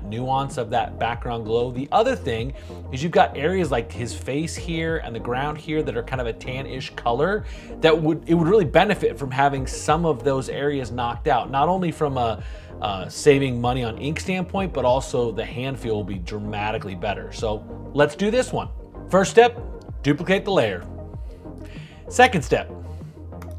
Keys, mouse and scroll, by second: 20.2 super+j.